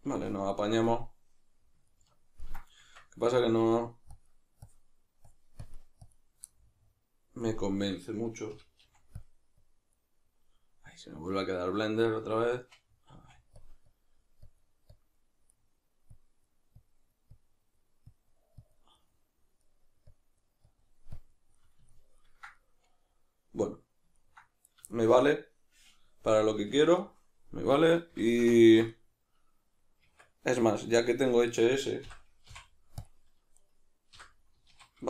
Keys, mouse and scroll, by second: 2.8 Tab, 4.1-6.5 shift+drag, 6.5-12.2 middle drag, 8.5 g, 8.9 f, 12.2 click, 13.1 f, 13.9-15.5 drag, 15.5 middle click, 16.1-19.0 drag, 19.0-20.1 middle drag, 20.1-21.5 drag, 21.5-31.5 middle drag, 30.1 Tab, 31.5 right click, 32.1 l, 32.5 x, 33.6 right click, 34.1 l, 34.7 alt+q.